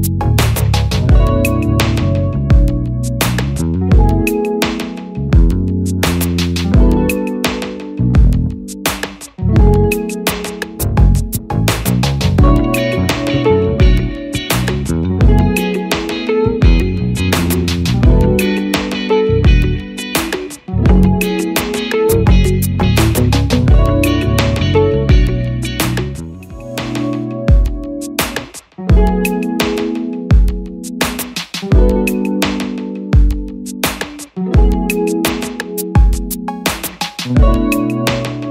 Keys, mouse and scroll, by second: 12.5 double click.